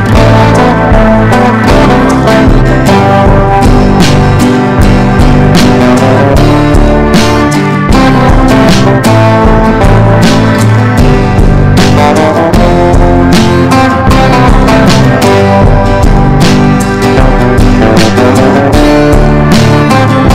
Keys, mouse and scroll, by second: 0.2 shift+click, 0.5 shift+click, 0.7 shift+click, 1.6 click, 2.5 ctrl+g, 3.4 click, 6.3 Down, 6.6 Down, 9.0 click, 11.2 ctrl+shift+g, 12.4 click, 13.4 ctrl+shift+g, 14.0 click, 14.4 ctrl+shift+g, 15.1 click, 15.6 ctrl+shift+g, 16.3 click, 16.8 ctrl+shift+g, 17.6 click, 18.1 ctrl+shift+g, 18.8-20.3 drag.